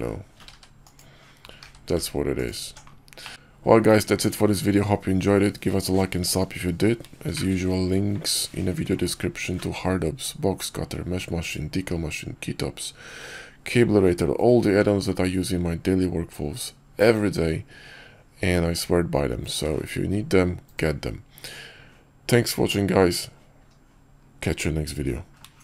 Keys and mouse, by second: 1.5 q, 3.1 drag.